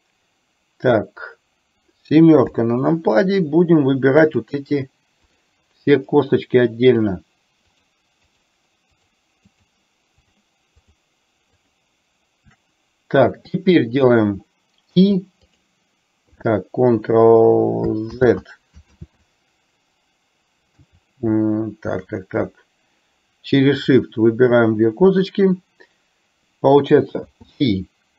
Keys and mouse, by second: 2.5 KP_7, 5.4 shift+click, 5.9 shift+click, 7.0 shift+click, 7.8 shift+click, 9.0 shift+click, 9.7 shift+click, 10.3 shift+click, 10.9 shift+click, 11.8 shift+click, 18.2 ctrl+z, 19.2 ctrl+z.